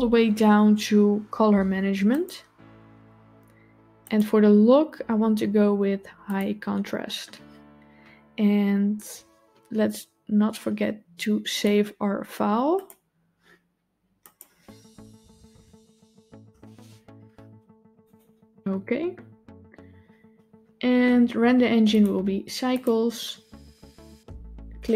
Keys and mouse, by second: 3.9-6.3 drag, 11.5-12.9 drag, 21.8-22.8 drag.